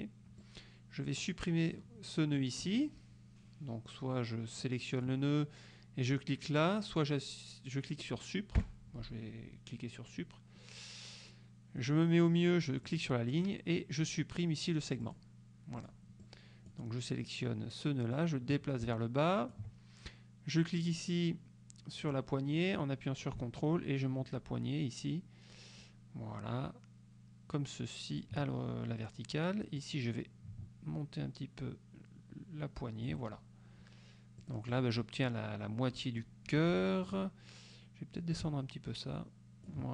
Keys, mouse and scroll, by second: 0.5-2.0 drag, 2.5 click, 4.7-5.3 drag, 8.7 Delete, 13.0 click, 15.1 click, 15.8 click, 16.3 click, 18.2-19.8 drag, 22.2-28.5 drag, 29.9-33.4 drag, 34.5-35.1 drag, 35.4-36.5 drag, 36.6 F2, 37.2 click, 38.4-39.9 ctrl+drag.